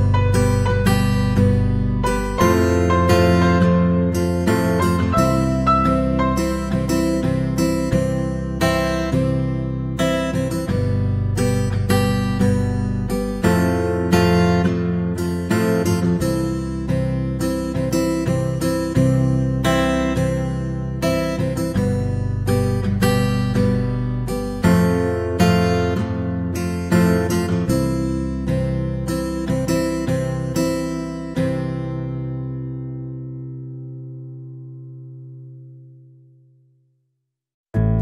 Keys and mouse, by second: 0.0 g, 4.6 shift+middle click, 5.2 alt+z, 5.7 c, 6.6 c, 7.4 g, 10.6 c, 11.3 g, 12.8 alt+z, 13.1 KP_3, 13.8 shift+middle click, 14.8 alt+z, 15.0 c, 15.7 g, 16.8 right click, 17.2 shift+middle click, 17.7 c, 20.2 g, 20.9 right click, 21.2 c, 21.8 g, 22.7 right click, 23.0 c, 23.4 g, 24.6 w, 26.6 right click, 27.1 alt+z, 27.3 middle click, 28.2 right click, 28.4 KP_3, 29.0 middle click, 30.6 g, 31.8 middle click, 32.7 right click, 33.2 middle click, 33.7 g, 34.9 middle click, 35.4 middle click, 37.0 alt+right click, 37.3 middle click, 37.9 g.